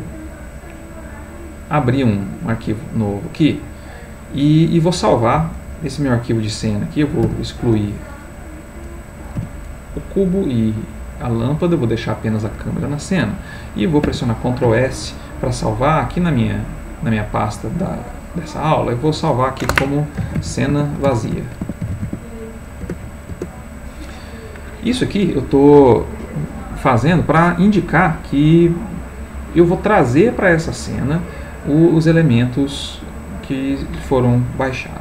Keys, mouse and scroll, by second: 1.0 click, 2.1 click, 3.4 click, 4.7-7.2 middle drag, 7.2 x, 7.9 click, 8.8 click, 9.4 x, 9.6 click, 10.3-11.9 middle drag, 14.0 ctrl+s, 16.3 click, 18.5 click, 20.2-22.0 typing, 22.8 Return.